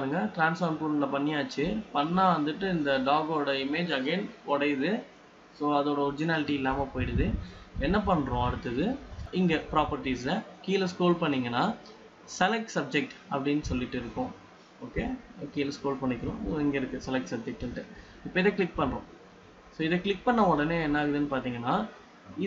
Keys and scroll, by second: 1.8 ctrl+z, 6.8 ctrl+z.